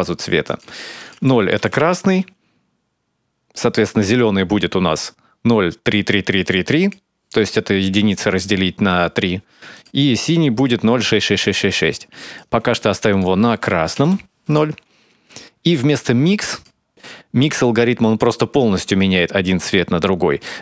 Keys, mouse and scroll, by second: 9.5 click, 12.1 click, 16.2 click.